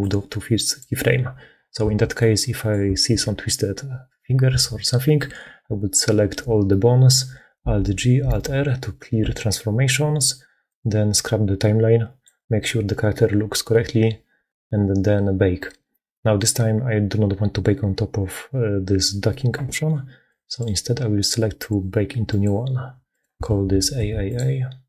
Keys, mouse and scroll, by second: 2.1 click, 4.4 a, 8.1 alt+g, 8.1 alt+r, 11.1-12.2 drag, 23.6 shift+click, 23.6 shift+a.